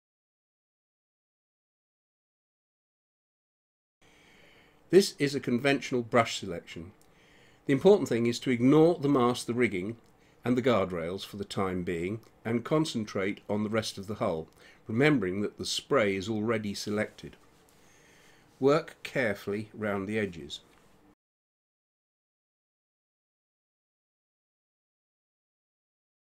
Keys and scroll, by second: 9.3 space, 12.7 [, 21.4 space, 22.6 ctrl+z, 23.8 [, 26.0 space.